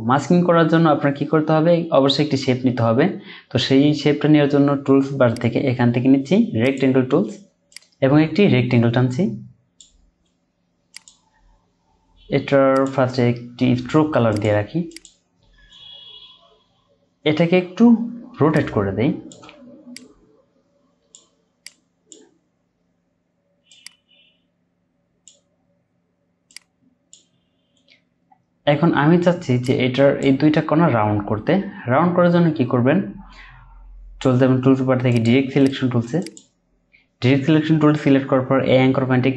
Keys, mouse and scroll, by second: 5.3 right click, 18.5 shift+click, 33.5-34.1 scroll up 1.